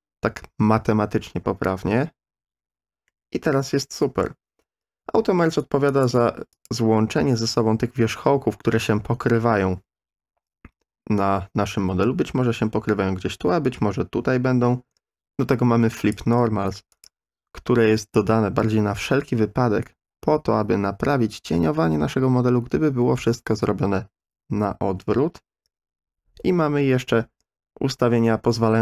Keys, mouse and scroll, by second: 3.1-4.2 middle drag, 5.9 click, 6.5 click, 16.0 click, 16.9 click.